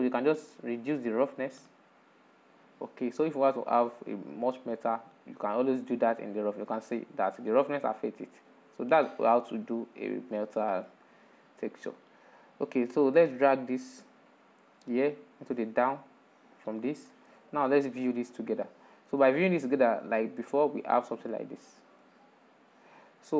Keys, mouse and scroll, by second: 0.8-3.7 drag, 3.8-6.8 drag, 8.0-10.3 drag, 10.3-10.9 middle drag, 10.9-11.3 scroll down 7, 11.5-15.1 middle drag, 15.1 click, 17.2 ctrl+shift+click, 18.3-19.4 drag, 19.4-23.3 middle drag.